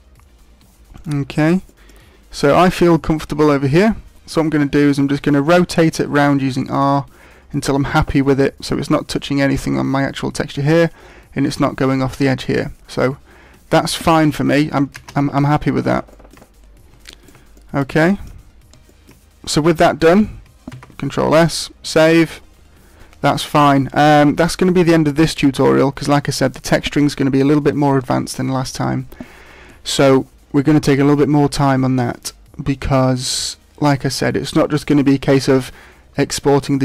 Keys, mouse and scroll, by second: 15.0 scroll down 5, 15.0 shift+space, 15.6-16.1 scroll down 1, 16.1 shift+middle click, 16.4-17.0 scroll down 2, 17.0 shift+middle click, 17.5 middle click, 18.0 shift+middle click, 18.3-18.8 scroll down 2, 18.8 shift+middle click, 20.8 ctrl+s.